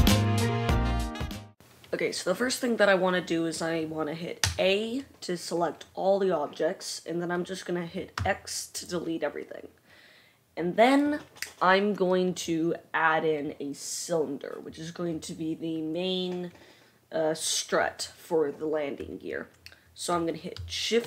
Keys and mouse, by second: 0.1 e, 0.3 Tab, 0.3 a, 1.5 ctrl+a, 4.5 a, 8.3 x.